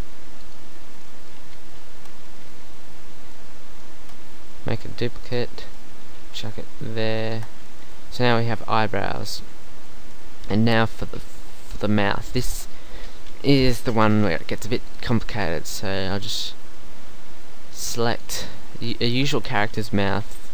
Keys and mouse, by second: 0.8 z, 1.3 z, 1.9 Tab, 4.0 Tab, 4.7 shift+d, 5.6 KP_1, 6.3 g, 7.3 Tab, 12.5 Tab, 14.0-15.6 drag, 17.8 click, 18.8 Tab, 19.3 Tab.